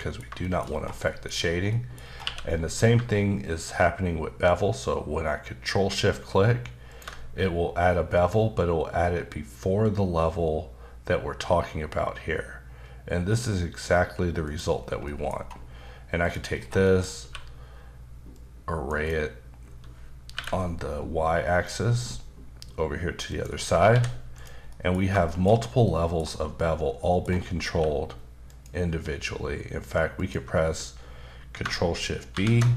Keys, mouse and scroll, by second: 0.4 shift+middle click, 0.7-2.2 scroll up 8, 1.0 middle click, 1.7 middle click, 2.2 q, 6.9 ctrl+shift+click, 14.4 click, 14.8 scroll down 2, 15.0 middle click, 15.4-16.2 scroll down 1, 16.2 click, 16.6 scroll down 2, 16.8 middle click, 17.2 q, 18.3 click, 19.0 double click, 20.3 y, 23.3 click, 23.9 h, 24.3 click, 24.7 middle click, 25.0 scroll down 2, 25.3 shift+middle click, 25.5 middle click, 25.8 middle click, 27.0 middle click, 27.7 q, 28.5 click, 30.2 click, 32.3 ctrl+shift+b.